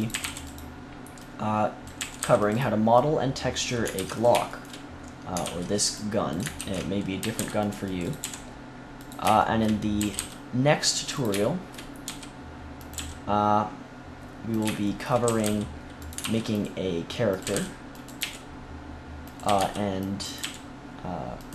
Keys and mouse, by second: 0.0-0.1 typing, 1.9 a, 2.1 c, 3.9 ctrl+s, 4.4 click, 5.4 ctrl+r, 6.3 click, 6.5 ctrl+z, 7.1 a, 7.3 c, 8.2 g, 9.9 a, 10.1 c, 12.0 e, 12.9 g, 14.5-17.2 drag, 15.2 a, 15.4 c, 16.1 ctrl+r, 17.4 a, 17.5 c, 18.1 g, 19.4 a, 19.5 c, 20.3 g.